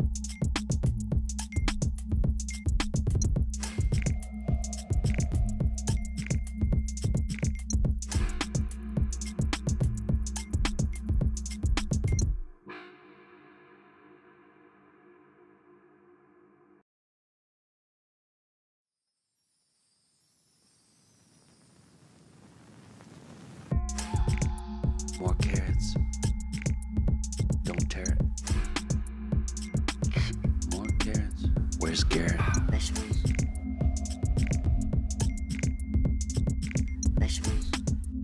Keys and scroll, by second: 0.5-2.1 typing, 3.6-7.9 typing, 8.1 Return, 9.7 BackSpace, 10.0 shift+=, 14.5-16.4 typing, 24.8 ctrl+t, 27.7 Return, 29.3-30.0 Up, 30.8 ctrl+h, 33.8-38.2 typing.